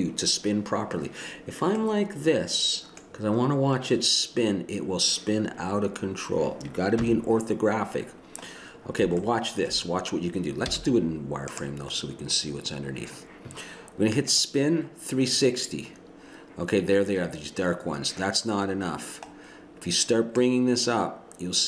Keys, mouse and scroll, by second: 2.1 middle click, 2.4-4.1 middle drag, 7.0 KP_1, 10.7 z, 14.3-15.5 drag, 15.9-17.8 drag, 20.4 click.